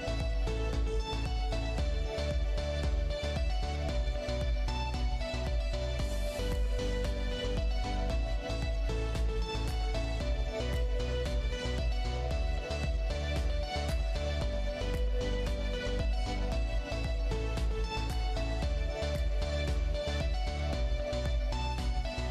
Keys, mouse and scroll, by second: 0.3 g, 3.0 i, 4.5 g, 11.3 click, 13.9 g, 17.9 i, 21.8 i.